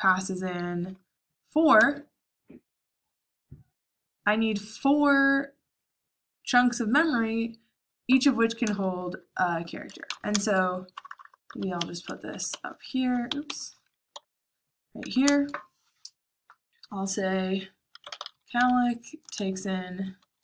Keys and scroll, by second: 1.7 j, 8.7 shift+a, 9.8-15.2 typing, 17.7-20.4 typing.